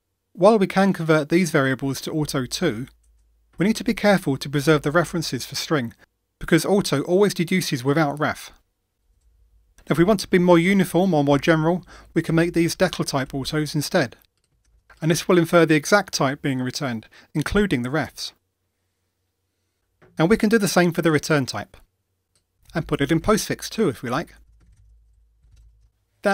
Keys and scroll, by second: 2.2 alt+Return, 13.2 Delete, 14.9 super+c, 15.1 super+v, 24.4 super+x.